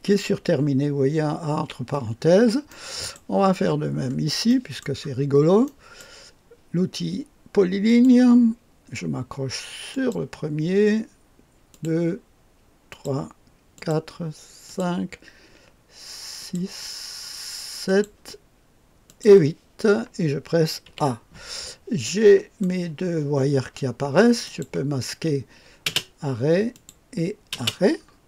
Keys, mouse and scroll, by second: 1.5 a, 2.1-2.7 scroll down 1, 2.7 right click, 3.6-4.4 scroll up 1, 4.4 right click, 5.6 right click, 7.8 click, 9.8 click, 11.7 click, 12.8 click, 13.7 click, 14.6 click, 16.3 click, 17.8 click, 18.6 typing, 19.0 click, 20.8 typing, 21.3-22.0 scroll down 1, 22.0 click, 22.1 right click, 22.1 scroll down 1, 24.4 click, 25.8 typing, 26.7 click, 27.5 typing, 28.0-28.2 scroll down 1.